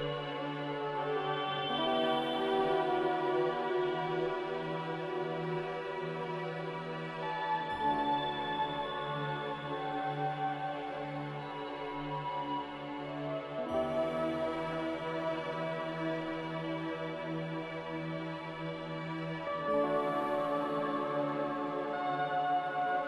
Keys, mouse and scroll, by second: 1.8 z, 4.1 z, 5.8-6.6 typing, 8.6 typing, 9.0 Return, 13.3 z, 14.7-15.5 typing, 17.2-17.9 typing, 21.0 z.